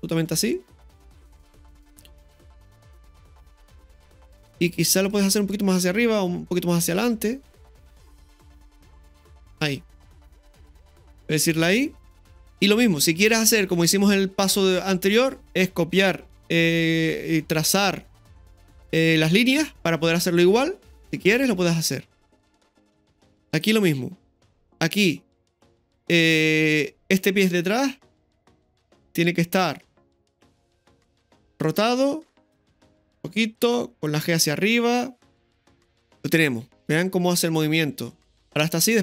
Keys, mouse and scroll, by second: 5.1 right click, 6.7 click, 8.3-9.4 drag, 11.5 i, 21.4-23.6 drag, 28.8 right click, 31.5 right click, 33.4 r, 34.2 g, 35.4-39.0 drag.